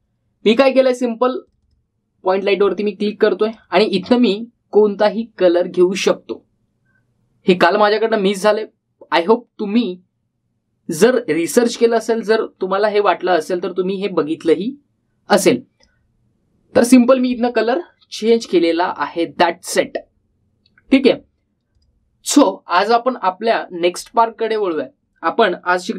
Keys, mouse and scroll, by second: 15.3-16.8 drag, 20.3-21.0 typing, 22.5 click, 24.6-25.3 typing.